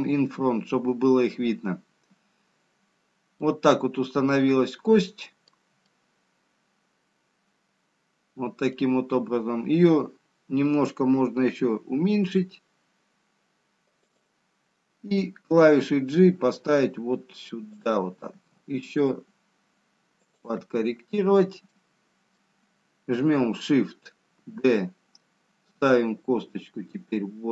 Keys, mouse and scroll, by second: 4.1 middle click, 4.1-5.1 scroll up 2, 6.3 middle click, 18.7 g, 21.9 middle click, 24.8 shift+d.